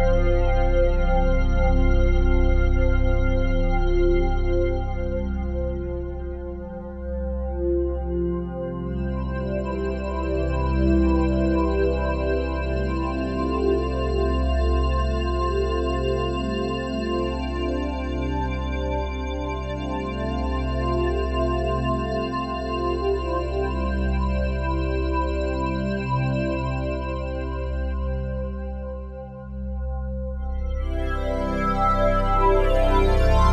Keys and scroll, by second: 6.1 a, 7.9 c.